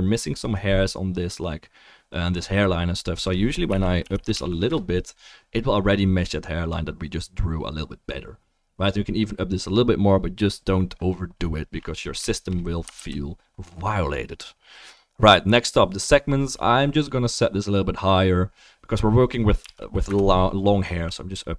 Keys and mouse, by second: 4.3 0, 13.0 ctrl+s.